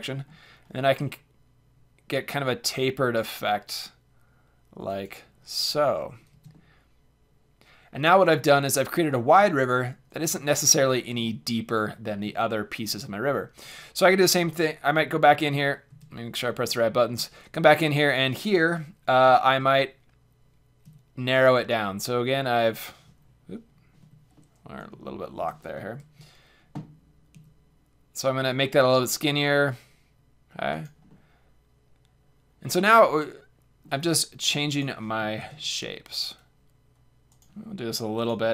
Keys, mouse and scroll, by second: 5.0-8.1 drag, 5.7 a, 6.3 z, 8.1 middle click, 9.6-12.0 middle drag, 12.8-14.5 middle drag, 13.6 Tab, 14.5 z, 15.0 z, 15.4 Tab, 15.9 z, 16.7-17.8 middle drag, 17.8-19.3 drag, 19.3 middle click, 19.4 ctrl+a, 19.7 middle click, 24.4-26.0 middle drag, 26.0 ctrl+a, 30.8 click, 31.0 middle click, 32.6 middle click, 34.7-36.7 drag, 35.4 ctrl+a, 37.4-38.5 drag.